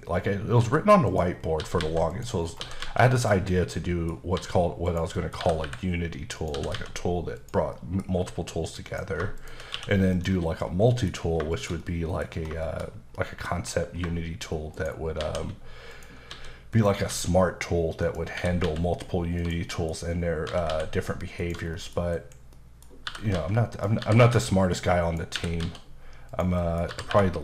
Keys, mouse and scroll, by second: 0.0-2.8 typing, 0.1-0.6 scroll down 2, 1.1 click, 1.4 scroll down 3, 2.1 click, 2.4 scroll down 2, 3.1 click, 3.5 scroll down 2, 3.7 middle click, 4.4 s, 4.9 click, 5.1 middle click, 5.4 g, 6.4 click, 6.5 typing, 7.4 click, 7.7 middle click, 8.1 s, 8.9 click, 9.4 shift+click, 9.7 q, 10.1 click, 10.6-10.9 scroll down 2, 10.9 middle click, 11.1 scroll down 2, 11.5 shift+middle click, 12.6 shift+middle click, 13.1 middle click, 13.5-14.0 scroll up 3, 14.7 shift+right click, 15.2 shift+a, 15.9 click, 16.3 s, 16.7 click, 17.1 s, 18.0 click, 18.3 typing, 19.4 click, 20.3 scroll up 1, 20.5 typing, 21.4 click, 21.7 middle click, 22.2-24.2 typing, 22.6 middle click, 23.7 click, 25.3 typing, 26.3 click, 26.6 middle click, 26.9 typing.